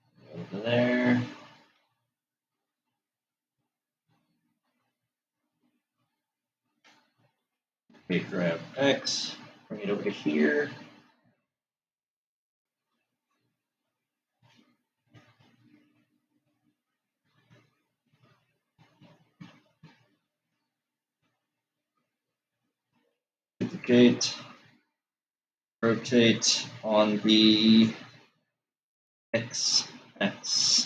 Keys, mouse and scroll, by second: 2.4-5.7 middle drag, 7.0 click, 8.2 shift+d, 16.2-19.7 middle drag, 24.0 shift+d.